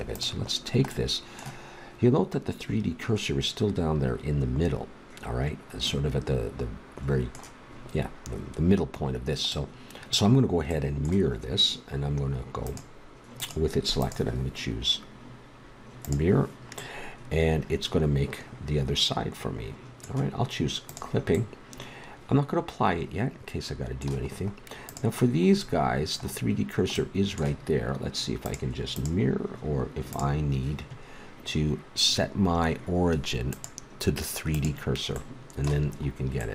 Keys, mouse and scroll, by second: 0.1 right click, 0.6 click, 1.1 middle click, 1.7 click, 1.9-4.7 middle drag, 12.6-15.9 drag, 15.9 middle click, 20.9-22.0 drag, 22.0-23.3 middle drag, 24.2 middle click, 24.8-25.9 drag, 25.9 middle click, 26.0 click, 26.1 middle click, 28.4 middle click, 28.8-30.9 drag, 31.4-33.5 middle drag, 33.5-35.3 drag, 35.2-36.5 middle drag.